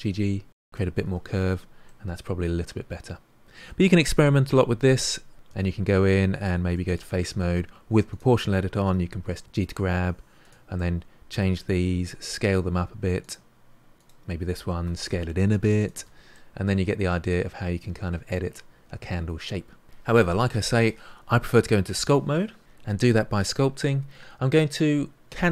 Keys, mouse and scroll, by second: 1.0 Tab, 1.4-1.8 scroll down 3, 1.8-5.4 middle drag, 5.4 Tab, 6.6 3, 6.8 click, 8.1 click, 8.8 g, 10.7-11.8 middle drag, 11.8 s, 13.9 click, 14.8 s, 15.9 Tab, 16.3-19.4 middle drag.